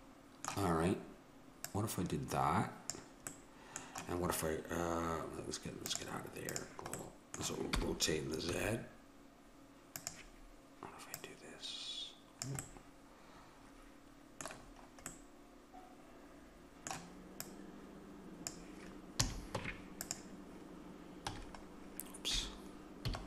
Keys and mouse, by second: 1.6-3.5 drag, 3.5-5.9 middle drag, 5.9-7.6 drag, 7.6 middle click, 7.8 r, 11.1-13.2 drag, 12.6 middle click, 13.2 middle click, 16.7 middle click, 17.5-19.2 drag, 19.2 a, 19.6 Tab, 21.3 z, 23.1 a.